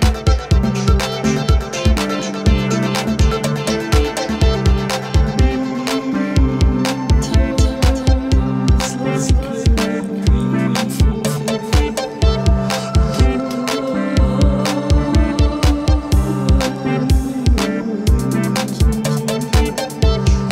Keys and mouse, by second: 0.0 ], 0.8 alt+click, 1.3 alt+click, 1.8 alt+click, 2.7 alt+click, 2.9 alt+click, 3.1 double click, 3.6 alt+click, 5.6 alt+click, 6.7 alt+click, 7.0 double click, 7.3 alt+click, 7.8 alt+click, 8.5 ctrl+-, 8.6 ctrl+-, 10.7 ctrl+=, 10.9 ctrl+=, 11.7 space, 13.8 alt+click, 16.8 alt+click, 17.7 double click, 19.0 double click, 19.0 space.